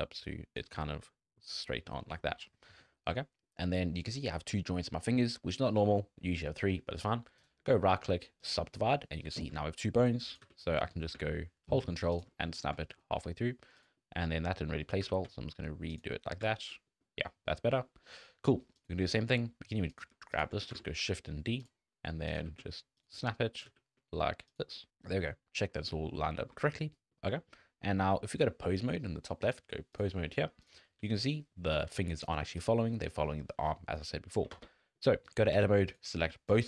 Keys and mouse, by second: 0.8 middle click, 1.9 middle click, 2.2 middle click, 2.9 middle click, 7.4-8.5 middle drag, 10.4 g, 12.3 click, 12.8 shift+click, 14.0 click, 14.4 click, 15.0 g, 16.1 middle click, 16.5 shift+middle click, 16.7 middle click, 17.1 middle click, 17.7 shift+middle click, 17.9 middle click, 18.7 click, 19.1 click, 19.9 click, 20.7 shift+d, 22.4 g, 23.7 g, 24.9 middle click, 24.9 g, 26.1 shift+middle click, 26.3 middle click, 26.6 shift+middle click, 26.9 middle click, 27.4 middle click, 28.2 middle click, 29.5-30.0 middle drag, 30.2-30.7 middle drag, 31.0 r, 33.0 r, 34.5 Tab, 35.5 alt+a, 36.5-36.6 shift+drag.